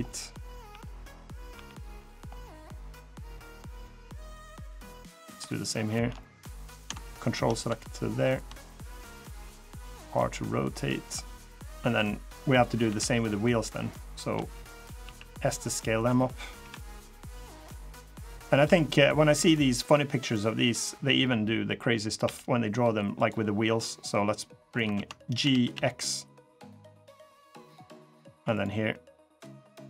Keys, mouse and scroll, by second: 1.3 r, 2.1 middle click, 2.8 click, 3.2 middle click, 4.2 middle click, 5.0 click, 5.6 shift+click, 5.9 middle click, 6.8 ctrl+click, 8.0 ctrl+click, 8.2 shift+click, 8.4 middle click, 9.3 middle click, 9.8 r, 10.9 middle click, 11.4-11.7 scroll up 1, 11.7 click, 12.6 l, 12.9-13.3 scroll down 4, 13.3 scroll up 3, 14.9 s, 16.3 KP_3, 17.6 click, 18.6 middle click, 19.5 click, 20.5 click, 22.0 g, 23.8 click, 24.7 ctrl+z, 25.2 g, 28.3 click, 28.6 scroll down 2, 29.3 click.